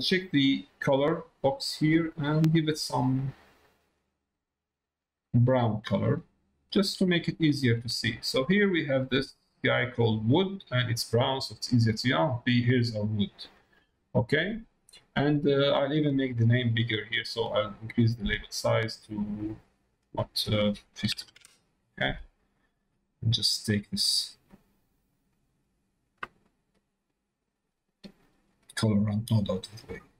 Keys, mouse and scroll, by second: 7.2 click, 7.8 middle click, 8.7 middle click, 10.6 middle click, 11.1 click, 12.6 click, 13.4 middle click, 15.1 middle click, 17.6-19.8 drag, 19.9-22.1 drag, 22.9 middle click, 23.8 middle click, 24.4 click, 25.6 middle click, 26.8-28.2 drag, 28.6-29.9 drag.